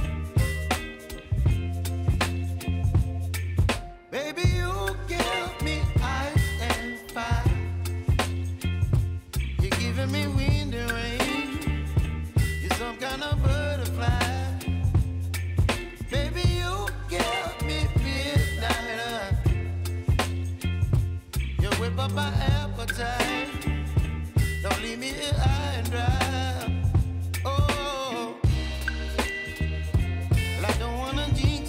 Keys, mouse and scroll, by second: 4.9 ctrl+alt+Home, 6.6 click, 8.4 p, 9.1 click, 12.4 space, 17.0 space, 23.2 space, 24.1 click, 24.6-25.5 typing, 26.5 right click.